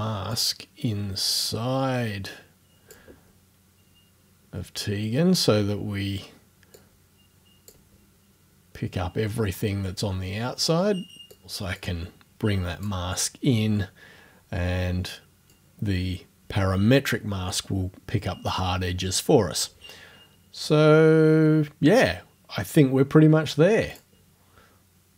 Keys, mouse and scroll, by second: 0.3-3.1 drag, 6.8-7.9 drag, 11.4 click, 11.8-13.0 drag, 15.5 click, 23.9 click.